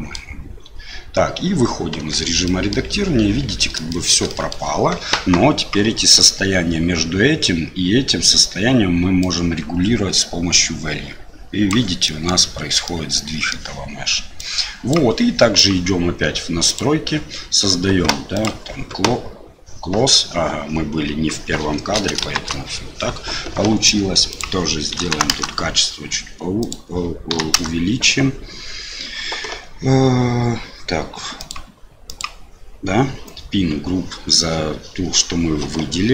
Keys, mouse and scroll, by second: 2.0 Tab, 2.4 middle click, 3.9 shift+middle click, 4.3 middle click, 9.2-11.7 drag, 12.0 middle click, 12.8 middle click, 14.4 click, 16.7 click, 18.3 click, 22.3 shift+Left, 24.3-25.4 drag, 26.7 click, 31.5 click.